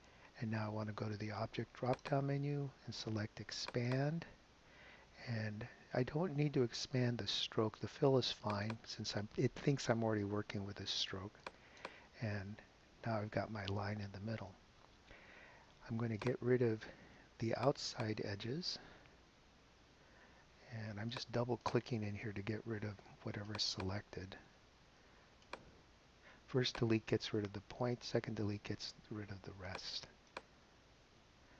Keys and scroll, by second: 19.4 BackSpace, 21.8 BackSpace, 24.0 BackSpace, 27.3 BackSpace, 28.6 BackSpace, 30.7 BackSpace.